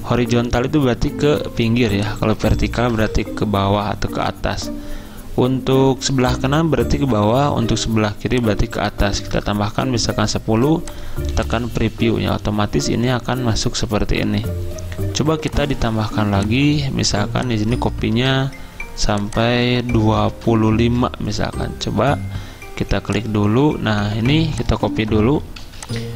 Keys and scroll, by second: 2.7-3.6 typing, 9.1-9.7 typing, 20.5-20.8 typing, 25.7-26.1 typing.